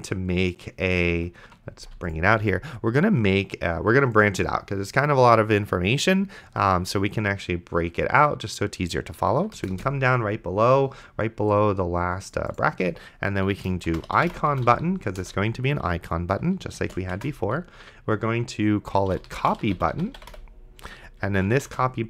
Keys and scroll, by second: 1.4 ctrl+x, 9.9 Return, 13.8-15.2 typing, 15.2 Return, 16.8-22.0 typing.